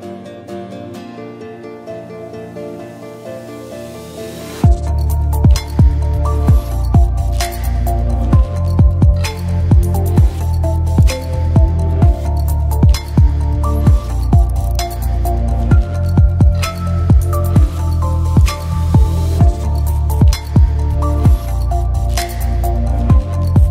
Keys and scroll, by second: 1.1 d, 1.4 r, 4.3-5.6 typing, 7.3 BackSpace, 18.4-19.3 typing, 21.4-22.4 typing.